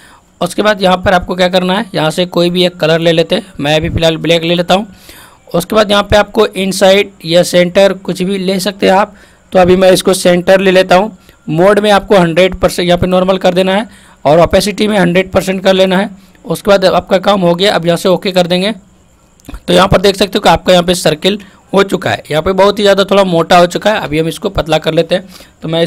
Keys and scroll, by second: 24.3 ctrl+alt+z.